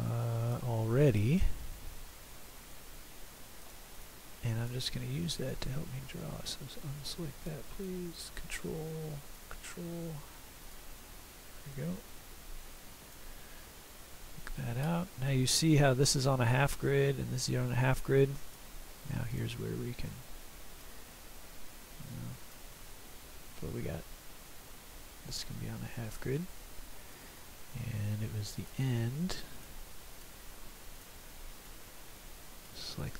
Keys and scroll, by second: 3.8 Escape, 30.6 Escape.